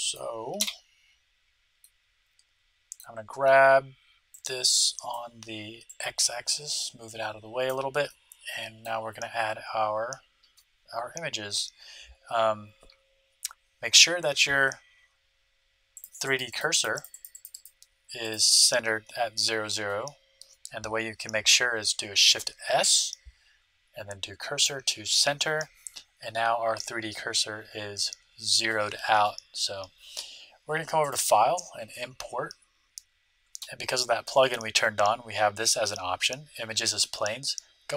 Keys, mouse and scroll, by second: 0.5 KP_1, 1.8-3.6 middle drag, 4.3-6.0 right drag, 5.8-7.7 drag, 8.0-10.0 middle drag, 16.0-19.8 drag, 22.4 shift+s, 31.0-32.8 drag.